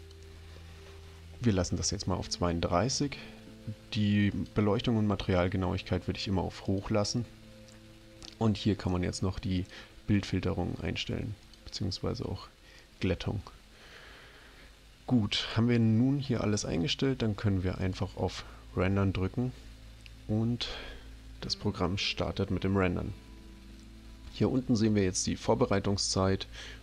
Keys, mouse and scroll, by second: 0.0 click, 4.3 click, 6.7 click, 9.6 click, 11.5 click, 17.8 click.